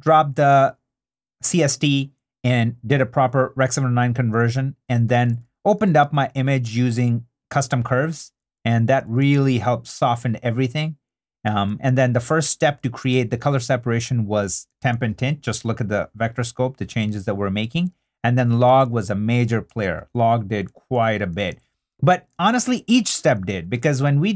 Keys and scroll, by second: 0.5 super+d, 5.3 super+d, 8.3 super+d, 11.6 super+d, 14.7 super+d, 17.9 super+d, 19.8 super+d.